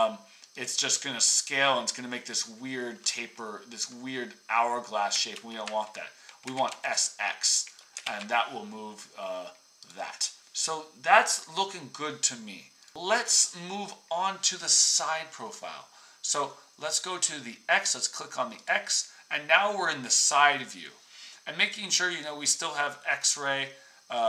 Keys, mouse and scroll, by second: 5.1-8.3 ctrl+drag, 5.3 ctrl+z, 6.4 s, 8.0 ctrl+z.